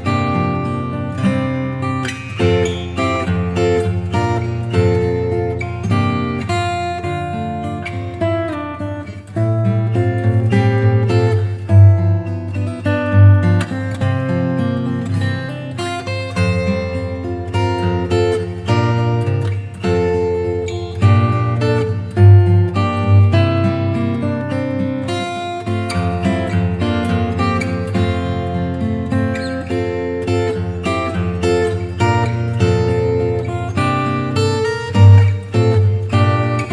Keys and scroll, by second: 9.0 super+Left.